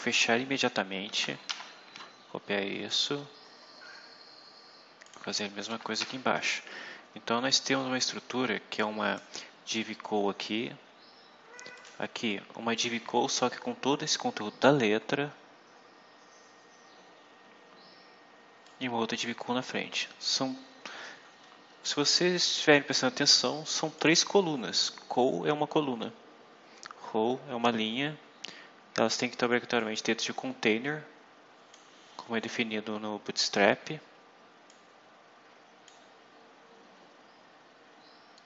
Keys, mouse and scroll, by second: 0.0-0.5 typing, 1.0 shift+Home, 1.4 ctrl+shift+c, 2.2-3.2 scroll down 6, 5.0 click, 5.6 KP_Enter, 5.9 ctrl+v, 8.7 click, 11.7 click, 12.8 scroll up 2, 13.3-14.6 scroll up 4, 14.7-15.3 scroll up 4, 15.8 scroll up 2, 18.6-19.7 drag, 23.9 click, 29.7-31.8 drag, 34.6-36.0 drag, 36.5-38.1 scroll down 6.